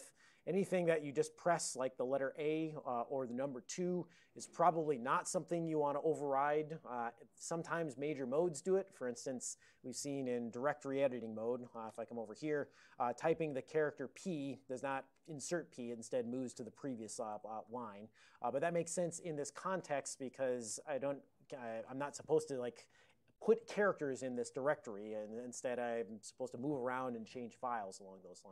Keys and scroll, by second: 11.6 ctrl+x, 11.9 d, 12.4 Return, 16.6-17.7 typing.